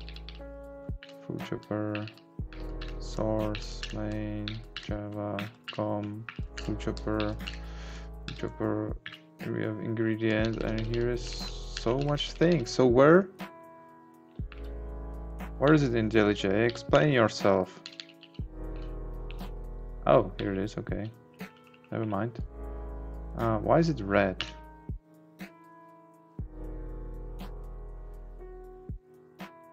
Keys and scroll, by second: 15.6 Down, 16.9 Right, 17.8 Down, 19.5 Right, 20.3 Down, 21.3 Up.